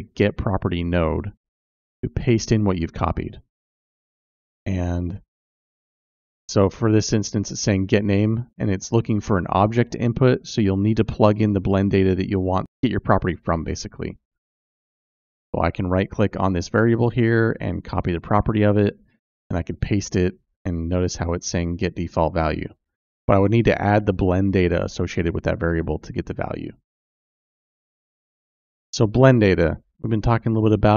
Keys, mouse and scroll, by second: 12.8-14.0 drag, 14.2 click, 14.7-15.7 drag, 18.3-20.2 right drag, 21.4 click, 26.9 click, 28.6 click.